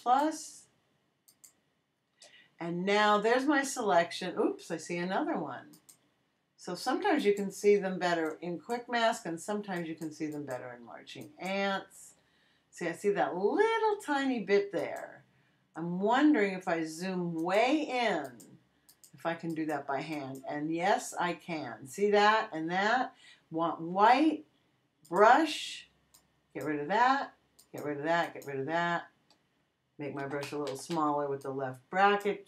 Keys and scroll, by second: 30.2 [.